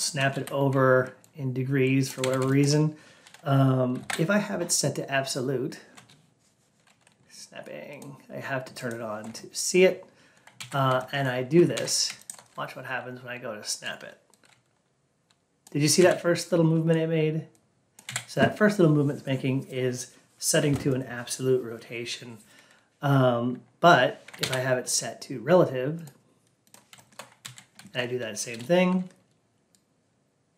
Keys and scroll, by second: 3.9 alt+p, 10.5 ctrl+a, 24.3 alt+p, 27.3 ctrl+a.